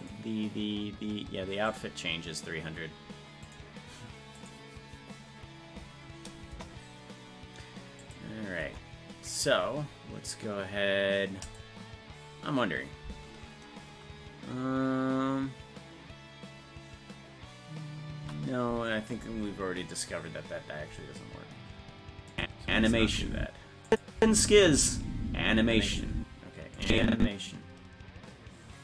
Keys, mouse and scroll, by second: 8.6 KP_0, 22.3 click, 22.6 space, 23.9 click, 23.9 space, 24.2 space, 26.8 click, 26.8 space.